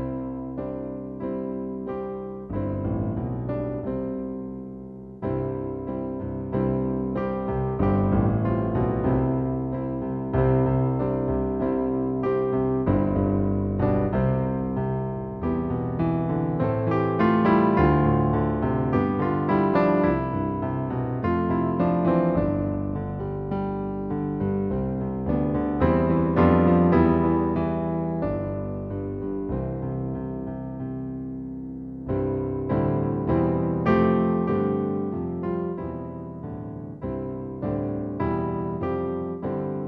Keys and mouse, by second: 1.2 super+z, 1.6 click, 3.7 click, 9.0 click, 12.6 super+z, 18.1 click, 19.3 click, 22.8 click, 29.8 n, 33.4 click, 38.5 click.